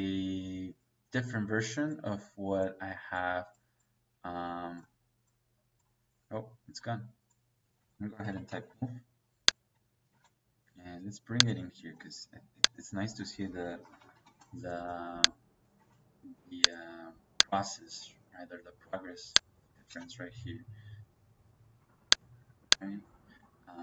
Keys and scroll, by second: 7.5 Escape, 8.1 m, 8.3 o, 8.5 e, 8.6 space, 10.0 space, 13.1 Escape, 13.5-14.3 typing, 15.7 space, 17.9 Escape, 19.8 space, 22.7 Escape.